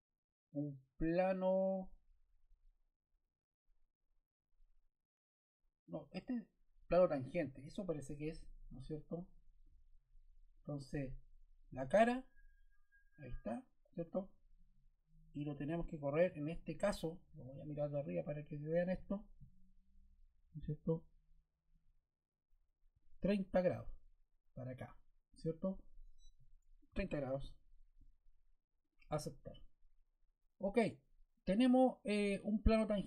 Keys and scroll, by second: 26.8 3, 27.9 0.